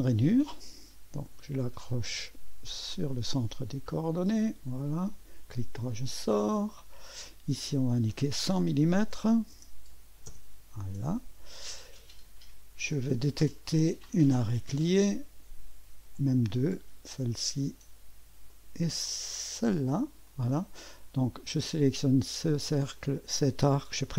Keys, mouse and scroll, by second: 0.0 click, 3.1 click, 4.5 click, 5.1 click, 5.1 middle click, 5.1 right click, 6.6 click, 7.6 click, 8.5-10.3 typing, 10.3 Return, 14.0 click, 16.6 click, 18.5 click, 19.6 click, 21.6 click, 23.0 click, 23.6 click.